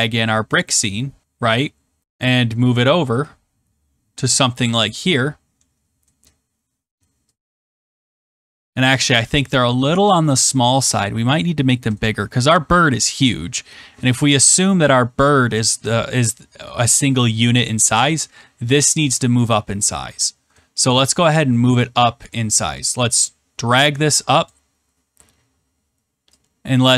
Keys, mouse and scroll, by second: 0.5 click, 1.4-2.0 scroll, 4.6 click, 4.8-5.8 scroll, 6.3 scroll, 8.8 click, 10.7 click, 11.1-13.3 scroll, 17.6 click, 19.8-20.4 scroll, 20.8-21.5 scroll, 24.4 click.